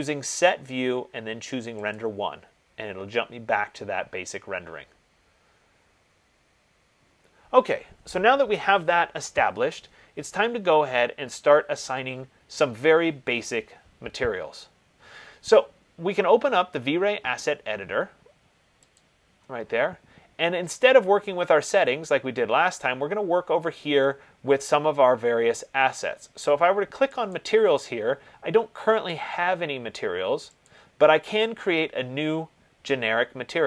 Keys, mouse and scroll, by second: 2.1 click, 19.2 click, 27.6 click, 30.9 click.